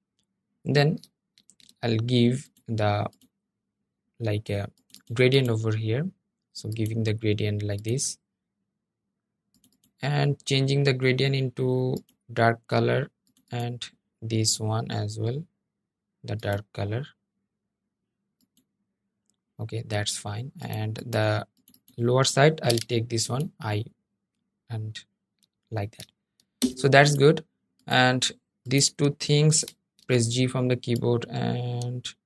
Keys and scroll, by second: 23.1 i, 28.1 g.